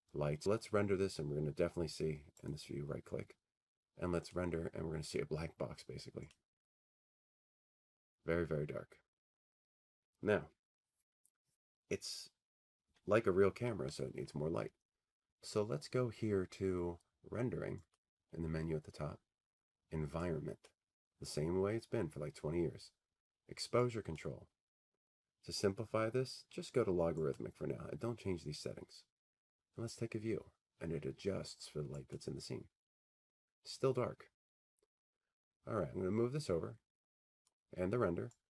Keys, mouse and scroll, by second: 4.5-6.4 right drag, 6.3 click, 8.3 click, 20.0 click, 22.8-24.8 drag, 26.1-28.3 drag, 29.4-31.6 drag, 34.1-36.3 drag.